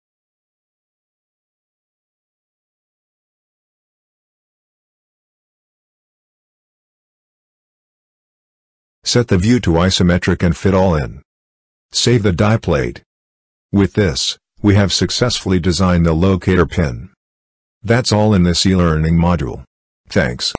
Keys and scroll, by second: 11.8 ctrl+s.